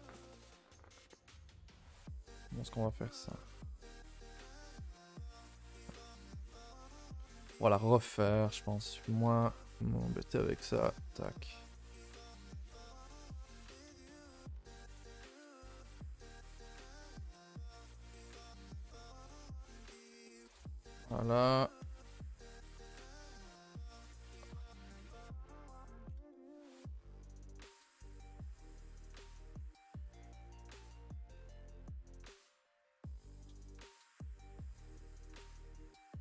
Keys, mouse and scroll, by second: 0.8-3.0 typing, 1.2 shift+middle click, 2.6 alt+click, 5.2 r, 5.9 g, 7.6 z, 8.4 alt+Left, 9.8 x, 10.5 l, 11.0 x, 11.3 2, 11.7 alt+Left, 12.4 z, 13.3 z, 13.8 r, 14.9 r, 16.8 s, 18.3 r, 19.9 z, 20.3 r, 21.8 e, 24.1 click, 24.5 s, 25.2 r, 25.7 g, 27.8 alt+click, 27.9 g, 29.0 alt+click, 29.2 g, 29.9 s, 31.7 alt+Left, 32.8 g, 33.6 alt+Left, 34.1 alt+Left, 34.9 click, 35.5 g.